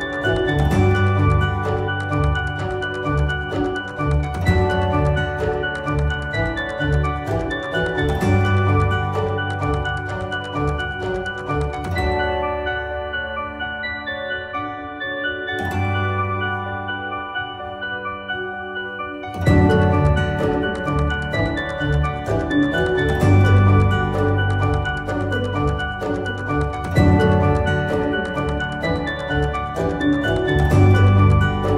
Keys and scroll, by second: 4.8 F4, 22.6 ctrl+z, 25.9-28.0 typing.